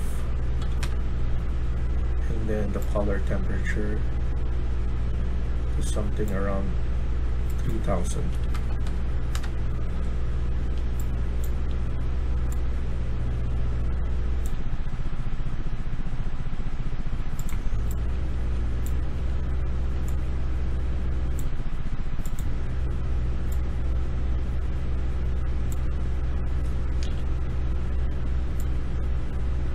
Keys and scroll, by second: 0.5-1.6 typing, 0.7 Return, 8.2 typing, 9.2 Return, 18.0 typing, 26.9 ctrl+z.